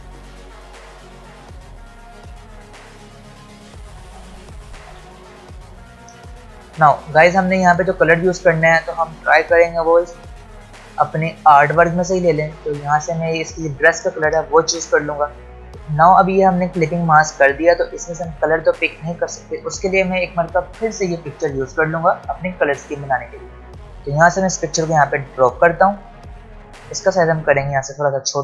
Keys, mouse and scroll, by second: 3.0 click, 4.9 v, 22.6-27.6 drag, 27.6 alt+scroll down 1.